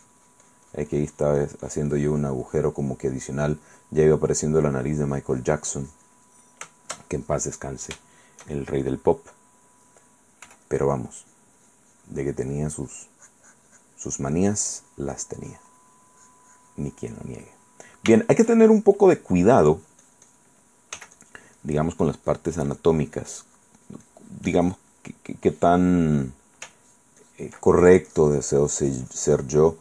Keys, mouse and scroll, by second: 3.0 click, 3.0 right click, 4.0 middle click, 4.1-5.1 drag, 4.1-5.1 right drag, 5.3-6.5 drag, 6.5 middle click, 8.2 shift+click, 10.6 f, 10.8 click, 11.4 click, 14.4-16.2 drag, 16.3 click, 17.4 middle click, 18.4 shift+middle click, 19.9 click, 21.1 f, 21.3 click, 21.8-23.2 drag, 25.8 click, 26.2 click, 27.0 ctrl+click, 28.0-29.8 ctrl+drag.